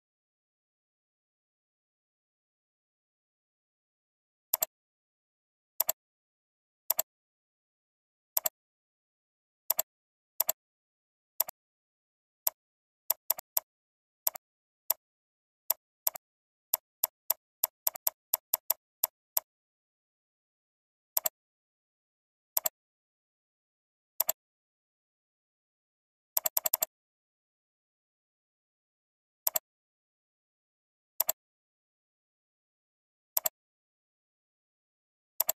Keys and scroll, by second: 25.7 ctrl+space.